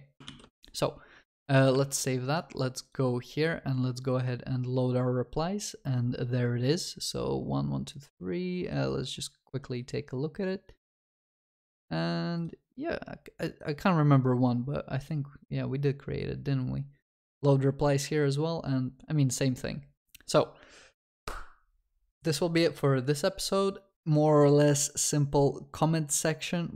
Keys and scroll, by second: 0.3 ctrl+s.